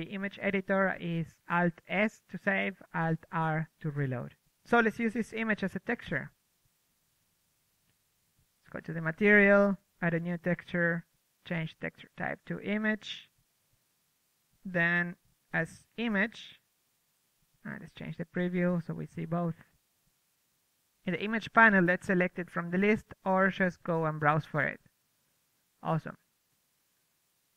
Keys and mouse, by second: 0.1 a, 1.3 KP_1, 3.2 KP_0, 4.8-5.9 drag, 5.7 ctrl+w, 7.4 ctrl+w, 7.4 shift+space, 8.7-15.3 drag, 19.1-21.1 drag, 21.1-23.0 middle drag, 21.6 a, 22.5 a, 23.0 a, 24.9-26.7 drag, 27.5 right click.